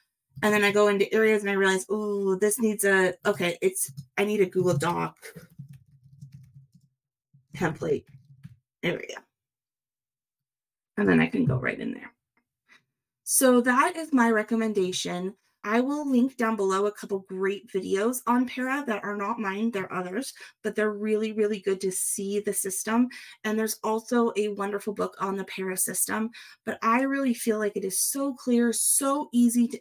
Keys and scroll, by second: 4.7 shift+d, 5.7 shift+g, 6.3 shift+space, 6.4 shift+d, 7.6 shift+t.